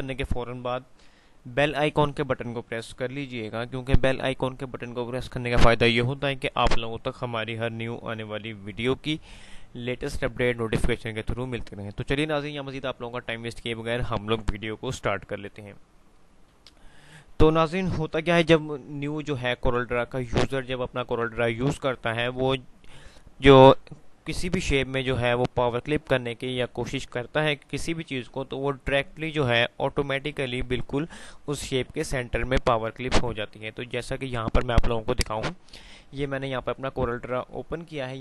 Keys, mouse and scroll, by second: 35.4 click.